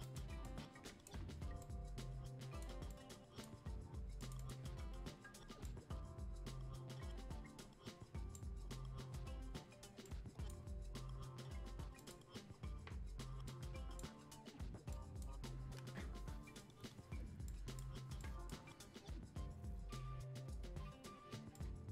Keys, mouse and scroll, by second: 21.5-21.9 drag.